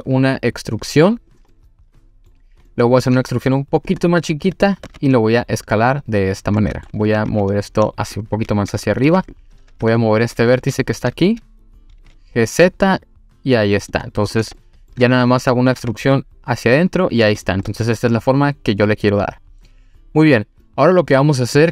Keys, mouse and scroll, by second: 1.3 click, 1.5-2.3 middle drag, 2.7-3.1 middle drag, 3.2 e, 3.9 click, 4.1-4.6 middle drag, 4.9 s, 6.3 click, 6.6 middle drag, 7.0 1, 7.3 2, 7.5-7.8 drag, 8.7 click, 9.0 2, 9.8 2, 10.0 click, 10.6 1, 10.8 click, 12.0 g, 12.0 z, 13.8 click, 14.3 click, 14.6-14.9 middle drag, 15.0 3, 15.2 click, 15.7 e, 16.9 click, 17.4 click, 17.7-19.7 middle drag, 19.8 scroll up 1, 19.9-20.4 scroll down 1, 20.5 scroll down 2, 20.6 middle click, 21.6 click.